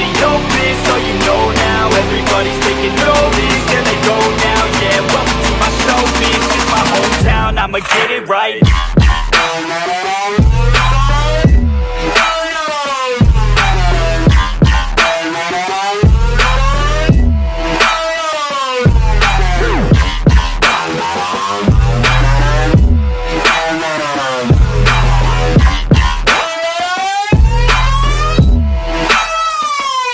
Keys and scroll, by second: 1.2 ctrl+t, 12.0 ctrl+t, 14.1 ctrl+t, 14.7 ctrl+d, 17.9 ctrl+d, 19.7 ctrl+d, 29.8 ctrl+d.